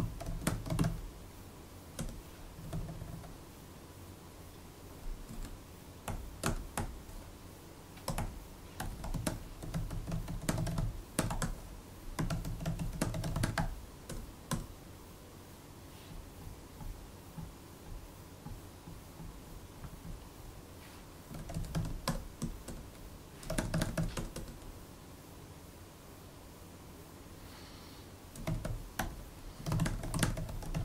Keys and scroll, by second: 0.0-3.5 typing, 5.2 shift+Tab, 5.9 Tab, 6.6 Tab, 7.9 Return, 8.0 Tab, 8.6-14.4 typing, 20.8-23.8 typing, 24.0 Return, 24.2 Return, 28.1-30.8 typing.